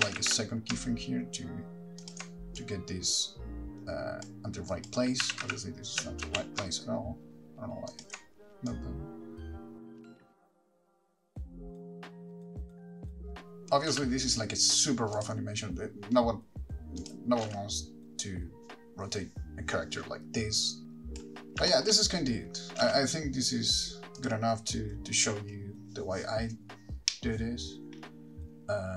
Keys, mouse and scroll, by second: 0.3 g, 2.3 ctrl+click, 2.8 click, 4.9 click, 5.5 g, 8.3 ctrl+click, 8.9 click, 9.8-14.2 typing, 10.0 click, 10.0 click, 10.0 middle click, 10.1 click, 10.2 click, 10.3 click, 10.3 click, 10.4 click, 10.6 click, 10.8 ctrl+click, 11.0 scroll down 3, 11.0 click, 11.1 click, 11.2 click, 11.2 click, 11.4 click, 11.5 middle click, 11.5 ctrl+click, 11.8 click, 11.8 ctrl+click, 11.8 shift+middle click, 12.0 Right, 12.0 ctrl+click, 12.2 click, 12.2 click, 12.3 click, 12.3 middle click, 12.3 click, 12.4 Right, 12.4 click, 12.5 click, 12.6 Right, 12.6 ctrl+click, 12.6 click, 12.7 click, 12.7 shift+middle click, 12.7 scroll down 12, 12.8 middle click, 12.8 scroll up 2, 13.0 click, 13.2 click, 15.5 click, 17.2 click, 17.7 space, 21.9 click, 21.9 shift+middle click, 23.0 space, 24.4 click.